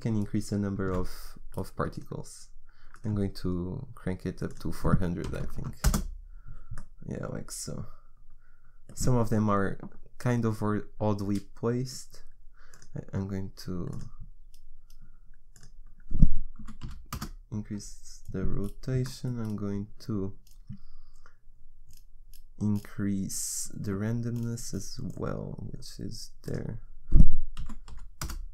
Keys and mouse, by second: 6.8 KP_0, 18.6 middle click, 26.5-28.3 drag.